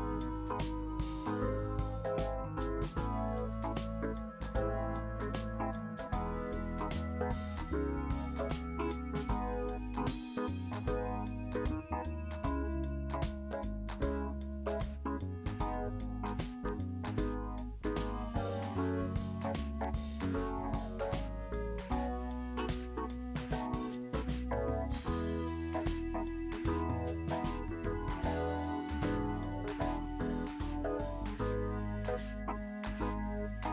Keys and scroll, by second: 9.2 shift+space, 15.5 shift+space, 28.5 shift+space, 33.2 s.